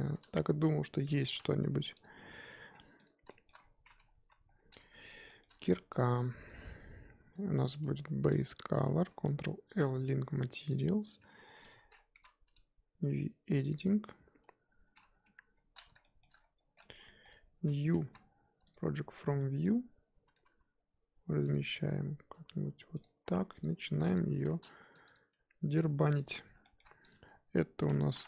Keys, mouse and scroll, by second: 0.0 Tab, 0.2 a, 2.0 alt+n, 2.4 Tab, 2.7-3.0 scroll down 3, 3.0 click, 3.2-3.6 shift+middle drag, 3.6-4.2 scroll up 3, 4.2 KP_1, 4.5-5.1 scroll up 4, 5.1 shift+click, 5.3-6.0 shift+middle drag, 6.0 shift+click, 6.4 shift+click, 8.8-10.7 drag, 10.7 ctrl+l, 11.4 Tab, 11.6 a, 12.1 3, 13.6 click, 14.7-15.2 scroll down 1, 15.2 KP_1, 15.5-16.0 scroll up 4, 16.0 shift+middle click, 16.3-17.6 scroll up 15, 16.8 shift+middle drag, 18.7 u, 20.1 a, 20.4 s, 24.2 s, 25.2 g, 26.6 shift+middle click, 27.0 click, 27.2-28.2 scroll up 1.